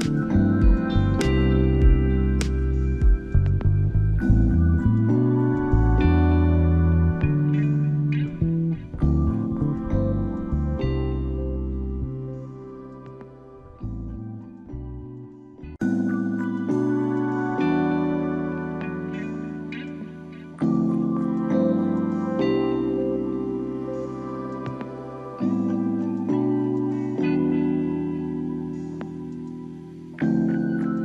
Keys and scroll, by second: 8.7 space.